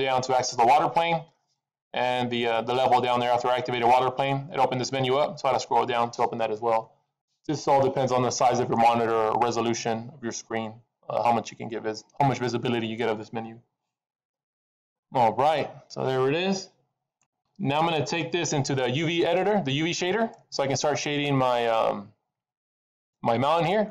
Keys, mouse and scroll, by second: 0.2-0.9 scroll down 3, 0.5-1.2 scroll up 6, 1.2-2.8 scroll down 6, 2.8-3.1 scroll down 6, 5.0-5.4 scroll down 7, 8.7 middle click, 14.8 middle click, 19.4 middle click, 23.2-23.9 scroll up 3.